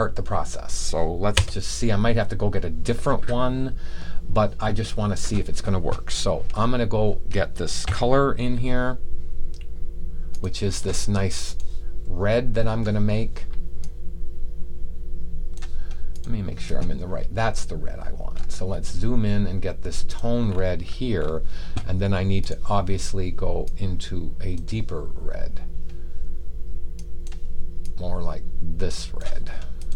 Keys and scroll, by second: 7.7 b.